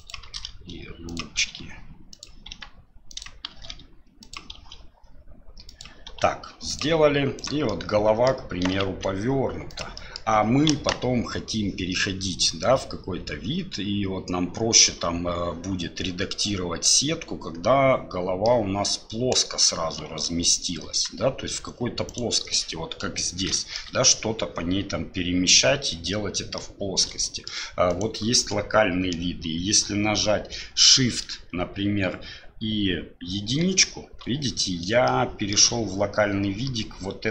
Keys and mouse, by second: 0.2 shift+d, 1.4 r, 2.5 g, 3.5 shift+d, 4.5 r, 6.1 g, 7.4 click, 7.7 middle click, 8.6 r, 9.9 middle click, 10.7 KP_1, 16.8 middle click, 17.3-18.5 drag, 19.3 KP_1, 20.2 KP_3, 20.8 KP_1, 22.1 click, 23.5 shift+click, 26.5 middle click, 27.2 shift+middle click, 27.9 right click, 33.4 shift+KP_1, 35.0 shift+click.